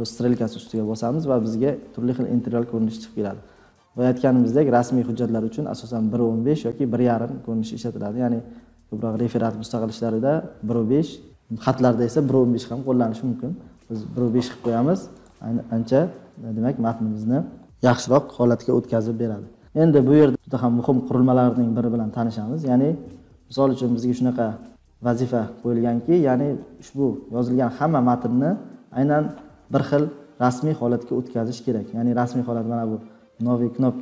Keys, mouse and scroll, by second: 15.2 click, 24.5-25.1 scroll down 7, 25.5-29.9 scroll, 30.2-31.6 scroll down 10, 31.7-32.6 scroll.